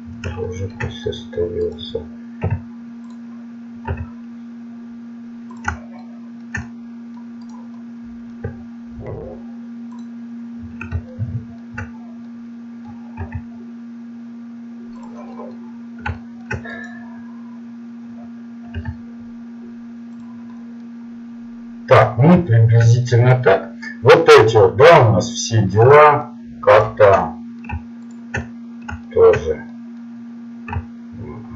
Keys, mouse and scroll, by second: 0.4-1.6 middle drag, 1.6 right click, 2.4 u, 3.9 s, 6.0-7.2 middle drag, 7.6 right click, 9.1 u, 10.0 u, 13.2 s, 15.3-16.7 middle drag, 16.7 right click, 18.8 s, 20.5-22.7 middle drag, 24.5 right click, 29.7-31.5 middle drag.